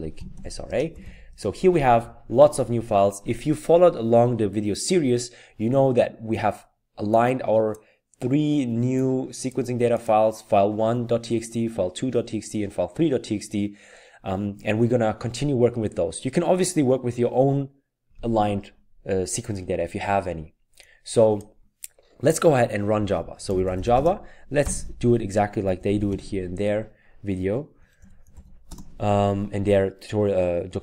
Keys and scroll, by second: 0.0-1.5 typing, 23.3-28.9 typing.